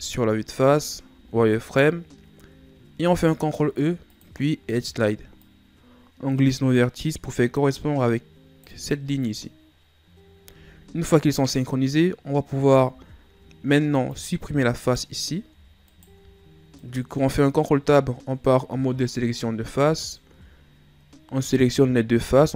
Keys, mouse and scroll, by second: 1.1 z, 2.2-3.0 scroll up 1, 3.0 ctrl+e, 12.7 ctrl+Tab, 14.8 right click, 15.9 shift+right click, 16.8 right click, 19.9 shift+right click, 22.1 x.